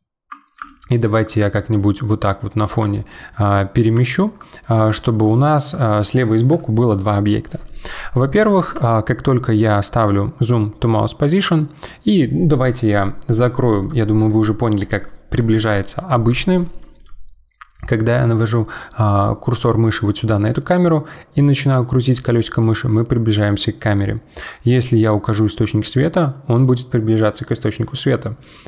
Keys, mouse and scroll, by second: 17.0 click, 20.9-22.7 scroll up 7, 22.7-23.6 scroll down 8, 25.7-26.9 scroll up 10, 27.9-28.6 scroll down 12.